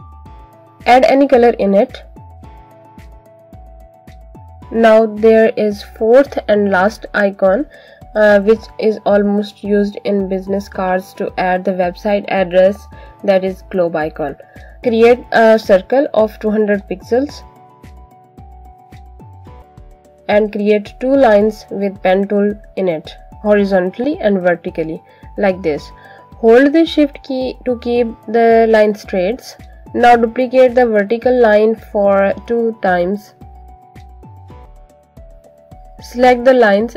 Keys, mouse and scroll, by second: 3.1 click, 4.6-5.1 scroll down 1, 5.9 click, 14.8 right click, 16.3 click, 17.6 alt+click, 18.4 click, 19.4 click, 23.5 click, 25.5 shift+click, 26.3 Escape, 27.3 click, 28.6 shift+click, 29.3 Escape, 30.6 click, 34.3 alt+click.